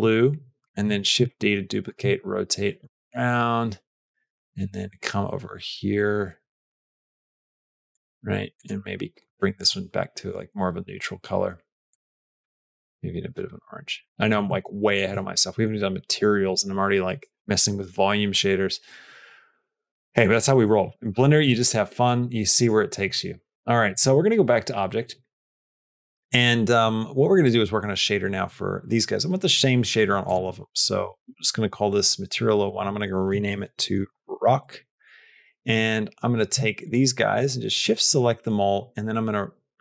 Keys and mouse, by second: 0.7 shift+d, 1.8 r, 8.4 click, 13.8 click, 14.1 r, 14.3 r, 19.7 click, 21.5 click, 22.5 click, 23.4 click, 26.2 middle click, 26.7 middle click, 32.6-35.5 drag, 37.1 shift+click, 37.6 shift+click.